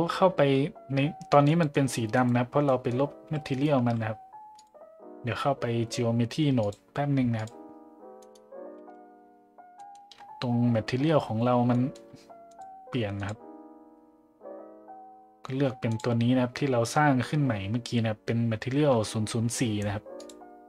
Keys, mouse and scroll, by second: 1.4 middle drag, 2.6 middle drag, 3.8 a, 4.6-5.5 drag, 6.6-7.5 drag, 9.8 middle click, 11.7 middle click, 12.5 click, 13.2-16.0 drag, 20.2-20.6 drag.